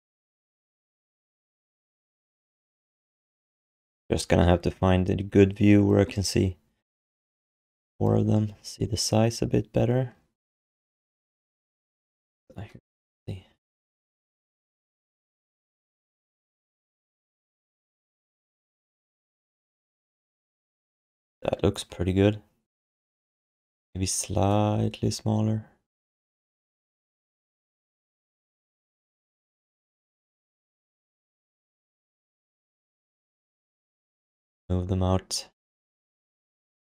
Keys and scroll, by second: 23.0 ctrl+z, 33.4 w.